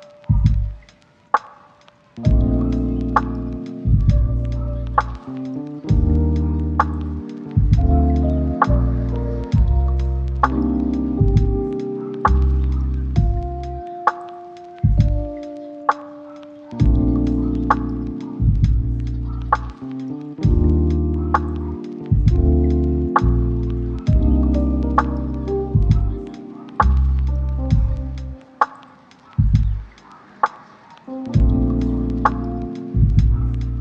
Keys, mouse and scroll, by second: 0.4 1, 0.8 shift+middle click, 0.9 shift+scroll up 2, 1.1 shift+middle click, 1.7 e, 2.4 r, 2.9 g, 3.6 r, 5.0 e, 5.9 g, 7.1 r, 7.7 g, 8.1 e, 9.3 r, 9.5 g, 10.6 e, 11.1 g, 12.3 r, 13.1 g, 13.8 shift+middle click, 14.2 r, 14.8 e, 16.6-26.0 typing, 25.8 ctrl+click, 28.8 g, 29.7 r, 30.9-33.8 typing, 32.1 shift+middle click.